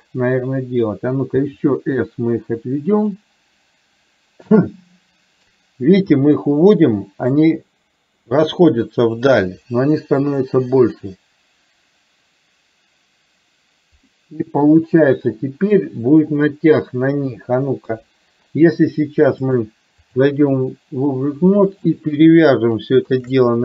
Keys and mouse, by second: 1.4 s, 6.3-7.4 middle drag, 14.1 middle click, 15.0 middle click, 17.9 KP_3, 19.5-20.6 drag, 21.8 click.